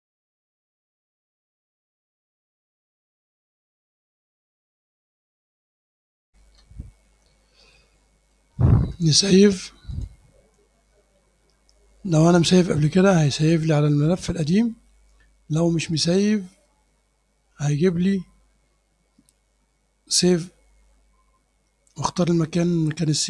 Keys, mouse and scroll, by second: 0.6-1.6 drag, 2.2 click, 2.5 click, 3.4 click, 4.4 click, 4.7 click, 4.9-5.4 scroll down 2, 5.0 click, 5.4 click, 5.6 click, 5.9 scroll up 1, 6.4 super+r, 7.8 click, 10.0 click, 13.4 click, 15.9 click, 17.7 click.